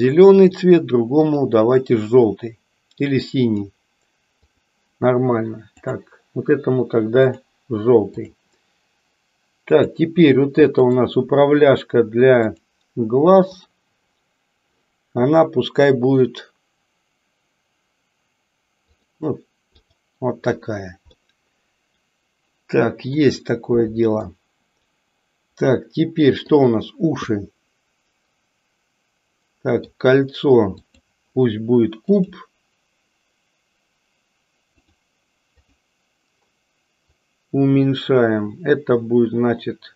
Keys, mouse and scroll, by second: 1.4 click, 3.5 click, 4.6 click, 5.7 click, 9.7 click, 10.9-12.7 drag, 13.5 click, 19.9 click, 21.2-23.3 middle drag, 24.2-26.6 middle drag, 27.2-29.9 middle drag, 31.0 click, 32.0-35.0 drag, 35.6 click, 37.1-39.9 drag.